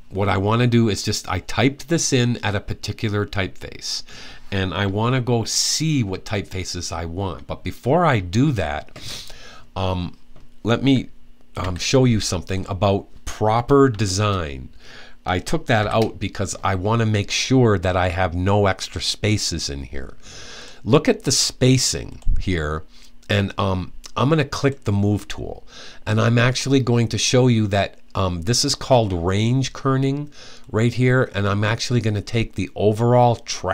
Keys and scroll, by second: 11.4 t, 15.6 p.